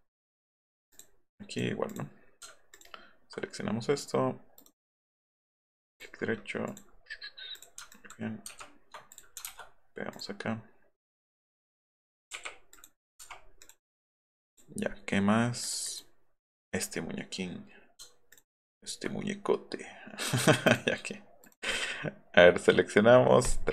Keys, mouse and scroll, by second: 0.9 click, 1.3 click, 1.9 click, 2.7 ctrl+click, 4.6 click, 5.1 click, 5.9 click, 6.7 click, 7.6 click, 7.9 ctrl+click, 8.5 ctrl+c, 9.5 ctrl+v, 10.1 click, 11.3 click, 12.4 i, 12.8 click, 13.6 click, 14.5 click, 15.6 click, 15.8 click, 18.3 ctrl+click, 20.7 click, 21.4 click, 23.4 click.